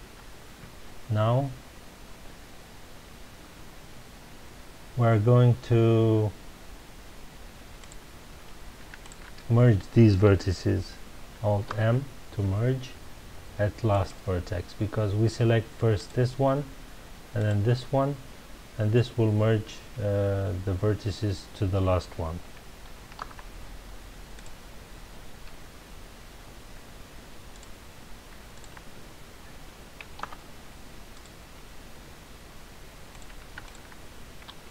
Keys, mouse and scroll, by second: 0.8-1.7 scroll up 2, 1.7 scroll up 1, 7.8 click, 9.0 shift+click, 11.6 alt+m, 15.9 click, 17.4 shift+click, 23.2 alt+m, 25.2-25.9 scroll down 2, 27.5 click, 28.5 shift+click, 30.2 alt+m, 32.3-32.6 scroll down 2, 33.1 click, 33.6 shift+click.